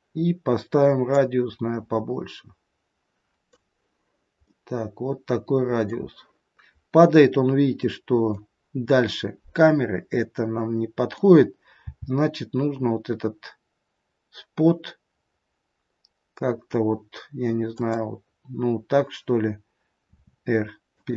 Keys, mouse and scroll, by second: 1.0 click, 4.4 middle click, 7.8 middle click, 9.7 middle click, 11.9 g, 20.0 r.